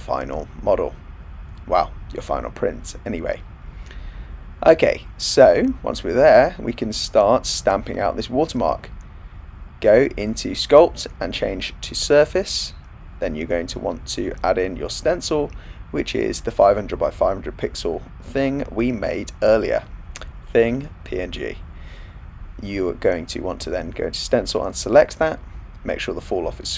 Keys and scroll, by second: 18.4 Return.